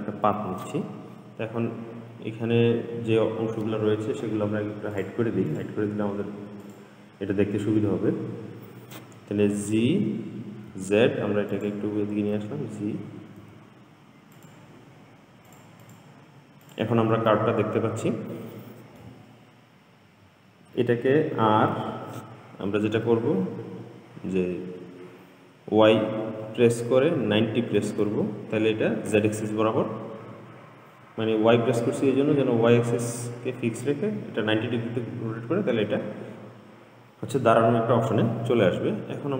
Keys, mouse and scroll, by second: 1.5-3.3 scroll down 2, 5.2 click, 5.8 click, 6.9 click, 9.9 g, 12.6 g, 15.7 click, 16.1 click, 16.9 click, 17.6-20.7 middle drag, 21.6 r, 35.4-37.9 scroll up 2.